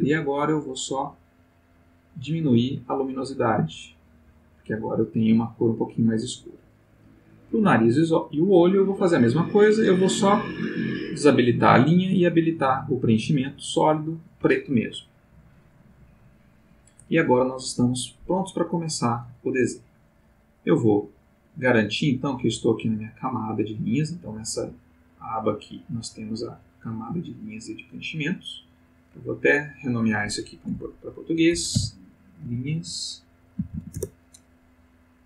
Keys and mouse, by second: 0.6-4.6 drag, 7.3 click, 9.8 click, 12.2 click, 21.9 click, 28.9 click, 29.5 click, 31.5-33.7 typing, 33.9 Return.